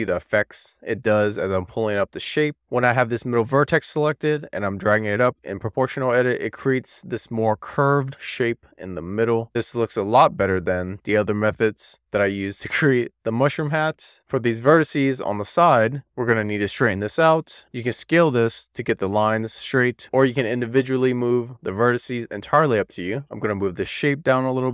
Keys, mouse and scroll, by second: 2.4-3.1 scroll down 2, 3.1-3.7 scroll down 1, 3.7-6.9 scroll up 2, 6.9 middle click, 8.1-8.8 scroll down 2, 8.9 alt+middle click, 10.7-11.4 scroll up 1, 11.4 scroll down 1, 11.5 middle click, 12.5-12.8 scroll down 1, 12.8-14.2 middle drag, 14.5 2, 14.6 middle click, 15.0 1, 15.1 middle click, 15.5 click, 15.8 middle click, 16.1 click, 16.3 super+z, 16.4 middle click, 16.7 middle click, 16.9 click, 17.1 click, 18.0-20.9 typing, 20.1 super+z, 20.2 super+z, 20.3 middle click, 20.9 middle click, 21.4 click, 21.8 middle click, 22.6 super+z, 22.7 middle click, 23.1 Tab, 23.9 click.